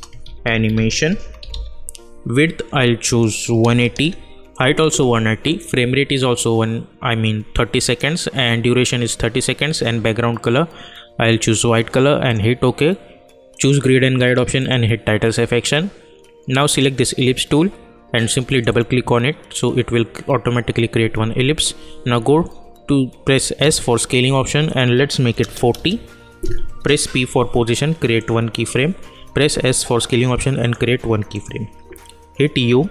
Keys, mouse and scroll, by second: 0.0-2.0 typing, 3.0 click, 12.2 click, 23.5 s, 24.6 click, 25.7 Return, 27.0 p, 28.1 click, 29.3 s, 30.6 click, 31.8 u.